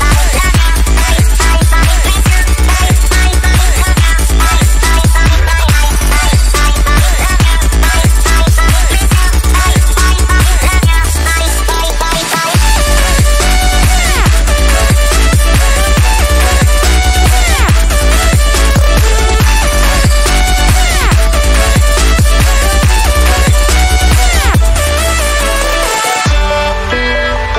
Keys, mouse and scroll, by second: 2.1 click, 3.0 ctrl+z, 3.3-4.9 drag, 4.9-6.5 drag, 6.5 ctrl+z, 6.9-8.0 drag, 8.0-11.0 drag, 11.0 space, 11.0 click, 11.2 space, 11.5 click, 12.8 click, 14.2 click, 18.7 alt+click, 19.2 click, 22.4 alt+click, 23.0-27.5 drag.